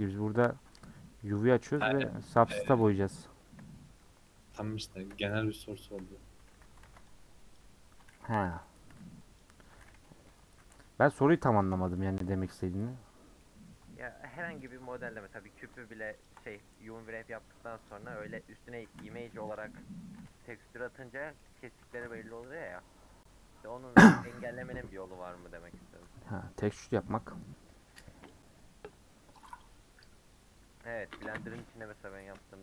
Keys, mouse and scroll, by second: 0.1 u, 0.5 Tab, 0.8 h, 1.3 click, 1.6 Tab, 1.8 middle click, 2.3-3.5 scroll up 1, 3.5 KP_Decimal, 4.3 middle click, 5.1 KP_1, 5.4 KP_3, 5.9 KP_Decimal, 6.5 3, 6.8 alt+z, 7.6 click, 8.5 ;, 9.4 click, 10.3 ;, 11.2 alt+z, 12.1 alt+click, 12.8 middle click, 13.5-14.7 scroll up 3, 14.7 click, 15.2-16.2 scroll up 1, 16.2 ctrl+click, 17.9 click, 18.6 scroll down 3, 18.9 a, 19.6 u, 20.6 /, 21.1 middle click, 21.4 /, 21.8 Tab, 22.2 h, 22.4-23.8 middle drag, 23.8 click.